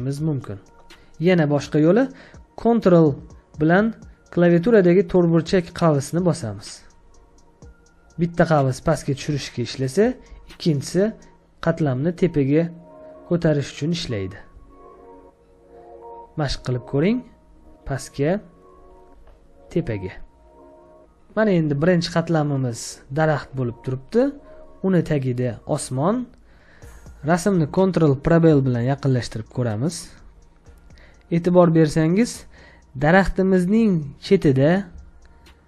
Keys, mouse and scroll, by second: 6.9 ctrl+[, 7.7 ctrl+], 8.5 ctrl+[, 9.0 ctrl+[, 10.7 ctrl+], 11.5 ctrl+], 16.8 ctrl+[, 17.4 ctrl+[, 18.7 ctrl+], 19.1 ctrl+], 23.1-24.2 scroll up 1, 26.5 ctrl+click, 27.5 space, 27.7 ctrl+click, 31.4 ctrl+click, 34.8 space, 35.0 ctrl+click.